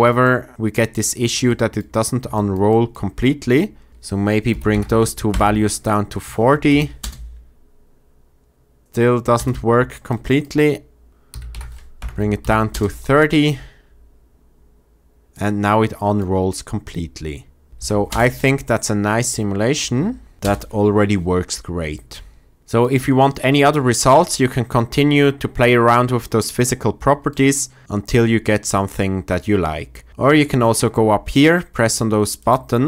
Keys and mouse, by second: 3.9-5.2 drag, 6.6 shift+Left, 6.9 space, 9.3 space, 10.2-11.9 drag, 12.3 shift+Left, 12.6 space, 17.7 shift+space, 17.8 shift+Left, 32.5-32.8 drag.